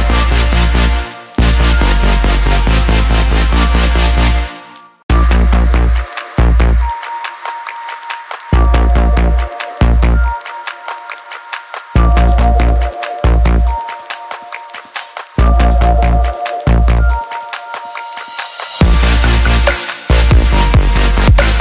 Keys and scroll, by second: 16.3 ctrl+j.